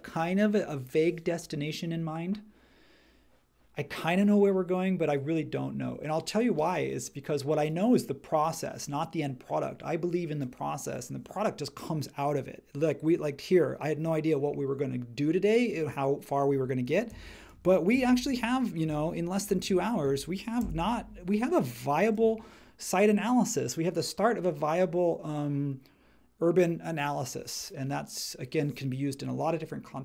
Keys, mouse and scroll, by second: 18.1 shift+Left, 19.4 shift+Left, 20.6 shift+Right.